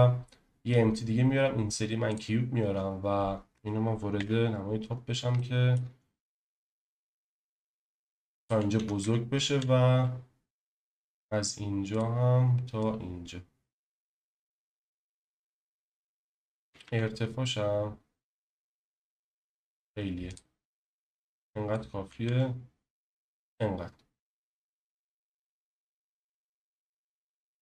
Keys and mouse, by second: 4.2 KP_7, 5.4-5.7 shift+drag, 6.3 s, 8.4 click, 8.7 s, 9.0 x, 9.5 z, 10.5 t, 10.5 y, 11.9 click, 12.8 click, 14.6-15.7 middle drag, 16.6 s, 16.9 x, 22.0 s, 25.2 KP_1.